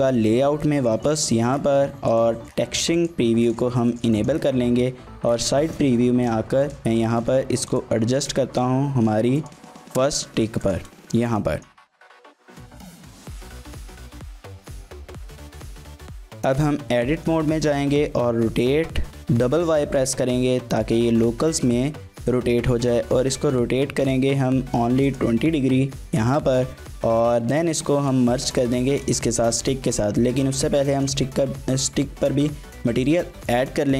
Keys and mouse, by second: 0.9 shift+middle drag, 1.2 middle click, 2.2-3.2 drag, 3.9 shift+middle click, 4.1 middle click, 4.7 KP_3, 5.6 shift+middle click, 6.3 z, 7.1 g, 7.7 click, 8.2 shift+drag, 8.4 r, 9.4 click, 9.6 g, 10.7 click, 11.0 shift+click, 11.4 click, 11.9-16.0 typing, 12.8 shift+click, 13.3 shift+click, 13.9 shift+click, 14.2 click, 15.7 middle click, 15.9 middle click, 15.9 Tab, 16.7 middle click, 17.6 r, 18.0 y, 18.7 y, 25.0 click, 25.9 Tab, 26.3 middle click, 28.9 shift+middle drag, 29.3 middle click, 31.0 click, 33.1-33.9 drag.